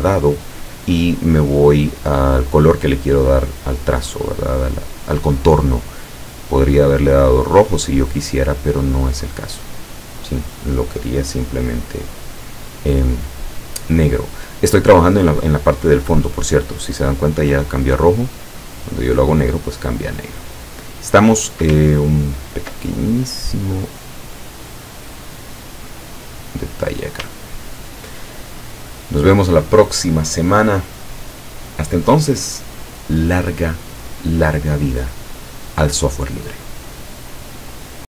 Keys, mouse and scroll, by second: 6.1-7.0 drag, 8.8-9.9 drag, 12.1-12.7 drag, 18.1-19.4 drag, 21.0 click, 22.3-22.6 ctrl+scroll up 2, 23.0 ctrl+scroll up 2, 23.1 ctrl+click, 23.9 click, 25.4-27.2 drag, 27.5-28.0 ctrl+scroll down 2, 28.3 ctrl+scroll down 2.